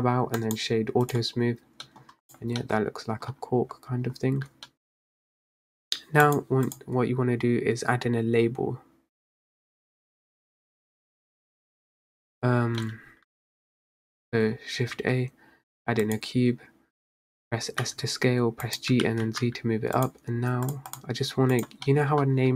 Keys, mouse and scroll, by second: 0.0-0.5 scroll down 4, 0.5-1.9 right drag, 1.9 middle drag, 2.1 scroll down 3, 2.4 click, 2.7 middle click, 3.4-3.9 scroll up 3, 4.1-4.8 scroll down 8, 4.8-5.4 middle drag, 5.4-5.9 scroll up 3, 6.3 click, 6.8 click, 12.9-14.0 middle drag, 14.0-14.6 scroll up 1, 14.6-15.1 scroll up 3, 15.1 shift+a, 17.3-17.7 scroll down 4, 17.9 s, 19.0 g, 20.8-22.0 drag, 22.0 middle drag, 22.1-22.5 scroll up 4.